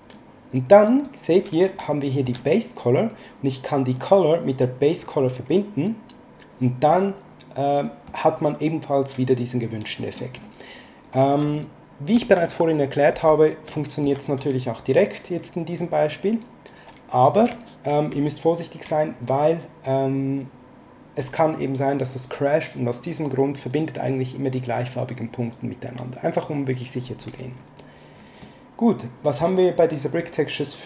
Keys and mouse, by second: 0.1 click, 1.9 shift+middle click, 3.9 click, 6.9 middle click, 11.5 shift+middle click, 13.8 shift+middle click, 14.9 click, 18.1 ctrl+z, 23.7 click, 28.4 middle click.